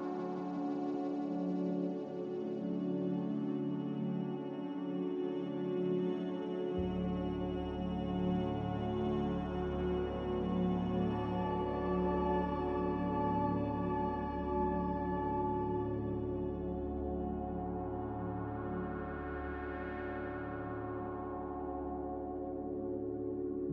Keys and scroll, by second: 1.7 space, 11.5 z, 15.3 typing, 15.7 Return, 20.3-20.6 typing, 20.6 Return.